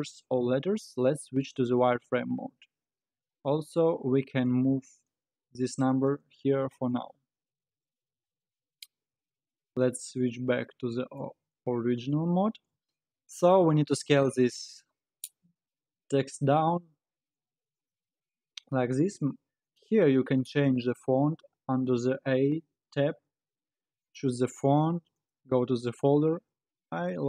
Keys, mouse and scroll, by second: 1.0 z, 4.5 g, 6.7 Tab, 7.5 Tab, 8.2 alt+z, 9.1 z, 10.6-11.6 middle drag, 11.6 scroll down 2, 13.0 KP_1, 16.5 s, 19.6 click, 20.3 scroll down 2, 23.3-24.0 scroll down 4, 24.0-27.1 drag.